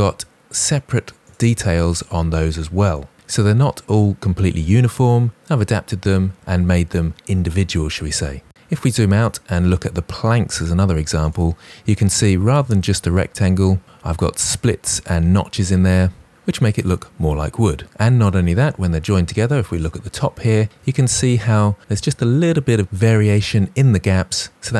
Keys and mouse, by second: 1.8 click, 11.4 click.